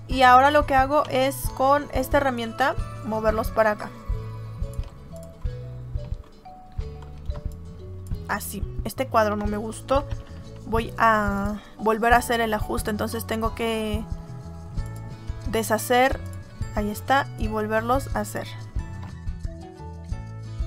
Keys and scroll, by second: 7.2 space, 10.0 ctrl+z.